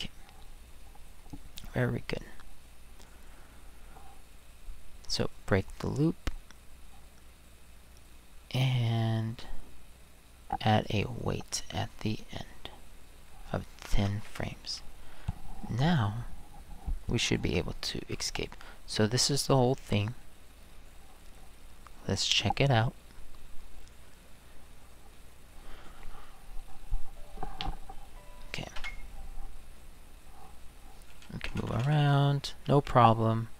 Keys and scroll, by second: 13.6-14.4 typing, 28.7 Return, 31.3 Down, 31.5 Left, 31.6 Right, 31.7 Up, 31.8 Right, 32.4 Right.